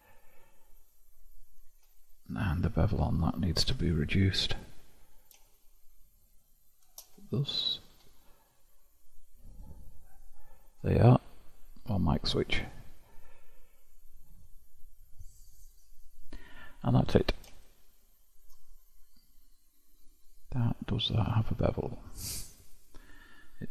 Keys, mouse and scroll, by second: 0.9 click, 3.7 q, 7.5-8.7 middle drag, 8.7-9.6 scroll down 9, 9.6 click, 10.4-10.8 scroll down 1, 11.4-13.5 middle drag, 13.5-14.0 scroll up 4, 14.0-15.9 scroll down 6, 15.9-17.1 middle drag, 17.1 click, 18.0-19.1 shift+middle drag, 19.1-20.1 scroll up 5, 20.1 click, 22.4 click.